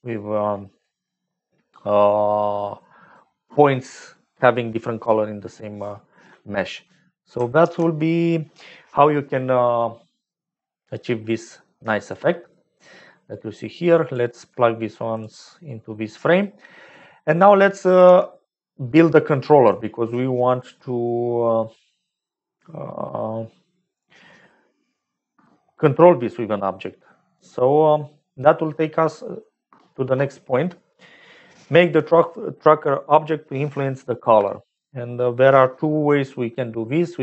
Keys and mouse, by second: 0.1 middle click, 1.9-3.1 middle drag, 7.5 ctrl+s, 13.5 click, 14.4 g, 16.5 click, 17.5 click, 18.0 g, 19.8 click.